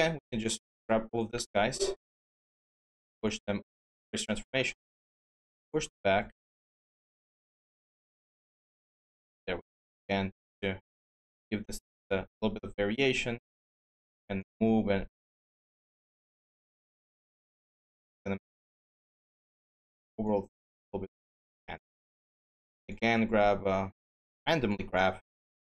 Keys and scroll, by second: 0.3 ctrl+d, 3.1 ctrl+z, 21.9 q.